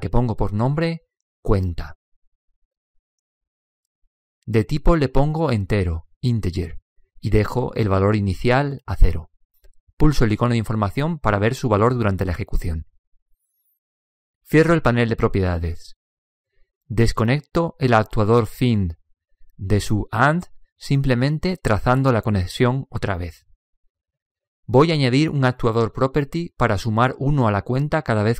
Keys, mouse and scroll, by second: 4.8 click, 10.0-12.8 drag, 15.9 n, 20.4 click, 27.9-28.3 middle drag.